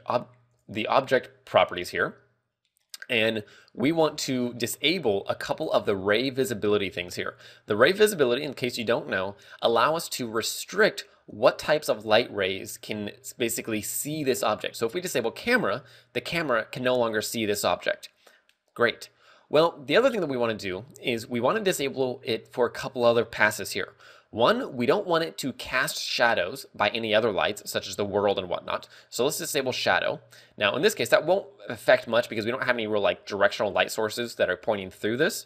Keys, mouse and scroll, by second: 0.2 click, 3.3 click, 4.5 scroll down 1, 5.3 scroll down 12, 5.7 a, 6.2 a, 6.5-7.0 scroll up 6, 7.5 a, 8.8 a, 16.1 click, 30.0 click, 32.9-33.9 scroll down 5.